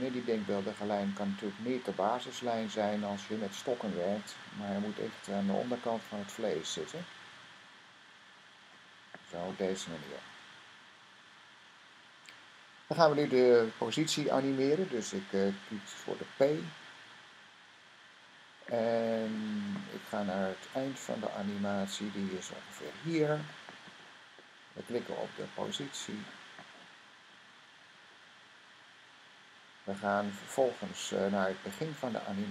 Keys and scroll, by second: 15.8 p, 17.2 typing.